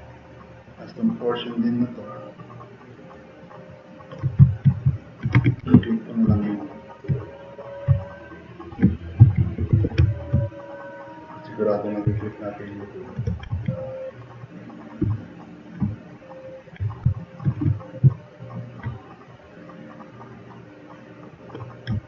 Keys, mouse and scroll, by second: 1.4-2.9 drag, 3.1-4.1 drag, 4.9 drag, 5.4 1, 5.6 q, 6.7 click, 8.0-8.8 drag, 8.9-10.2 typing, 10.5-11.9 drag, 12.1 click, 12.4-12.8 drag, 13.3 e, 14.0 click, 15.9 click, 17.1 click, 17.6 q, 18.3-18.7 drag, 20.8 click.